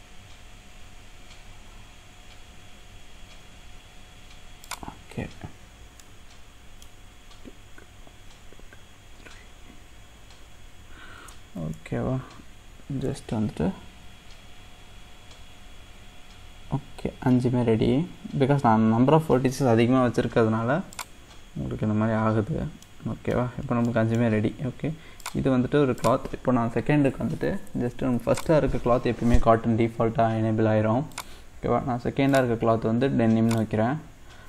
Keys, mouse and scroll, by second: 5.5-6.0 scroll down 2, 6.0-9.1 middle drag, 13.3 shift+d, 22.4-22.8 scroll down 2, 22.8 middle click, 23.3-23.9 scroll up 4, 23.9 middle click, 24.4-25.2 scroll up 1, 25.2 click, 26.0 click, 28.3-34.4 drag.